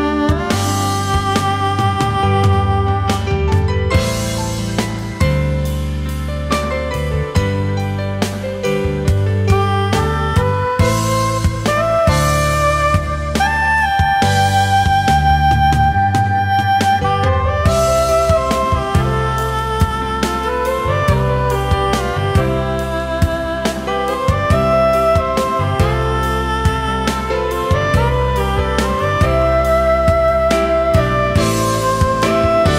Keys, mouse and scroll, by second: 5.2 shift+click, 9.1 alt+scroll down 1, 9.3 space, 10.7-11.8 alt+scroll down 1, 13.0-13.4 alt+scroll up 1, 13.4 space, 13.9-14.3 alt+scroll up 1, 14.3 space, 15.7 ctrl+shift+a, 16.5 alt+scroll up 1, 16.7 space, 22.3 ctrl+shift+a, 22.6 alt+scroll down 1, 22.8 space, 23.4 alt+scroll up 1, 26.4 ctrl+shift+a, 26.7 alt+scroll down 1, 26.9 space, 27.8 space, 28.7 alt+scroll up 1, 31.7 ctrl+shift+a, 32.1 alt+scroll down 1, 32.3 space.